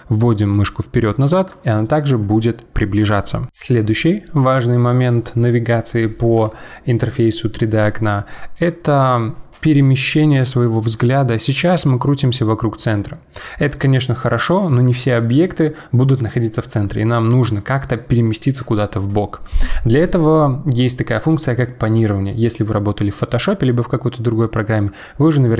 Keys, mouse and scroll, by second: 11.9-15.0 middle drag.